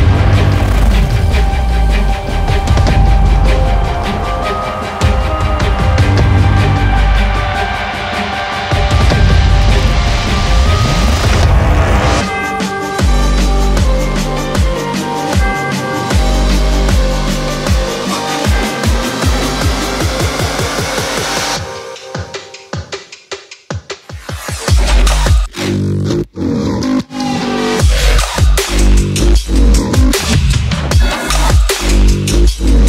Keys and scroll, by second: 8.0 ctrl+shift+-.